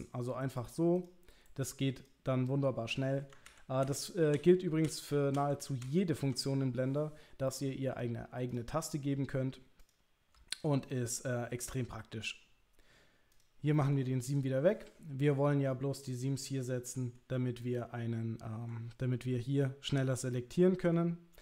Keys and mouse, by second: 0.0 click, 1.0 click, 2.0 click, 3.5 ctrl+z, 3.8 ctrl+z, 4.3 ctrl+z, 5.4 ctrl+z, 5.8 ctrl+z, 7.5 middle click, 8.9 middle click, 9.8 click, 10.5 ctrl+click, 10.9-13.5 right drag, 13.8 middle click, 14.3 click, 14.7 middle click, 16.1-17.2 middle drag, 17.6-18.7 middle drag, 20.4 middle click.